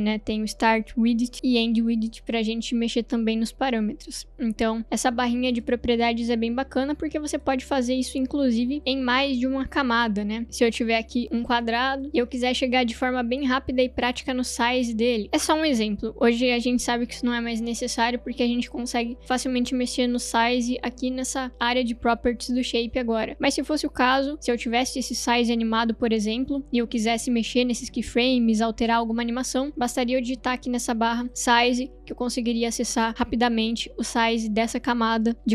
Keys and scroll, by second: 9.0 Delete, 29.5-31.3 typing.